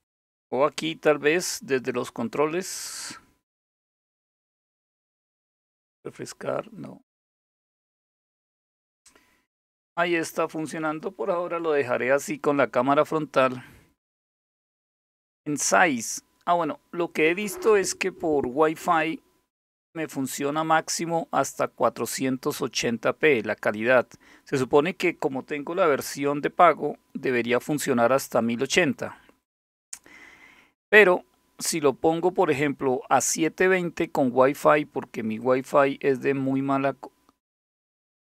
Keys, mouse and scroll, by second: 10.5 click, 13.8 click, 35.0 click.